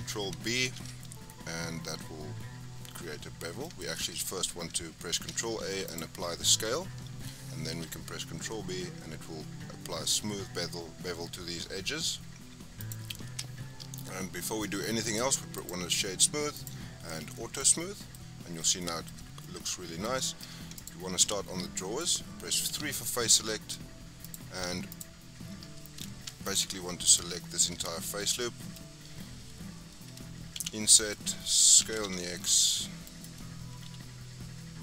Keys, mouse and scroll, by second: 0.6 ctrl+b, 3.9 Tab, 5.1 ctrl+a, 6.5 Tab, 7.7 ctrl+b, 13.2 Tab, 13.7-14.1 scroll down 4, 14.1 shift+middle click, 14.8-16.5 right drag, 16.5 click, 17.3-18.1 shift+middle drag, 18.1-18.7 scroll up 3, 18.7-19.2 shift+middle drag, 19.2 scroll down 2, 19.4-20.3 middle drag, 20.3 scroll up 2, 20.7 click, 21.0 Tab, 21.5-22.6 middle drag, 22.6 3, 23.2-24.2 middle drag, 24.2 click, 24.8 shift+click, 26.4 alt+shift+click, 27.0 alt+shift+click, 27.6 alt+shift+scroll down 2, 27.8-30.5 middle drag, 30.5 i, 31.8 s, 33.8 i.